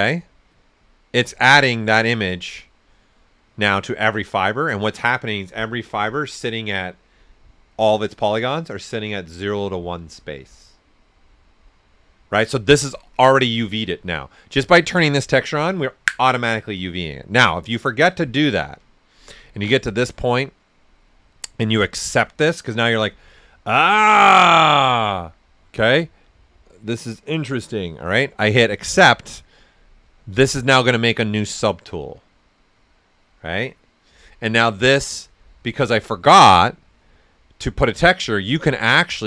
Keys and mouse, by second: 0.5 click, 1.2 right click, 4.8 typing, 13.8 typing, 13.9 ctrl+right click, 17.0 click, 17.0 typing, 18.9 right click, 19.7-23.1 drag, 19.7 typing, 28.7 click, 28.7 typing, 32.2 typing, 36.6 click, 36.6 typing, 39.0-39.2 typing.